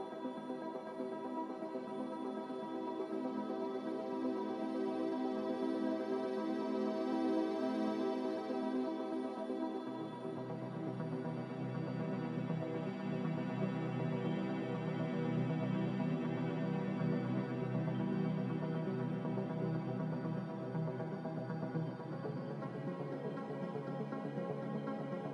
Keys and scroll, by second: 5.5 Escape, 8.6 a, 10.2 ctrl+c, 16.0 a, 16.5 f, 22.1 m, 23.1 n.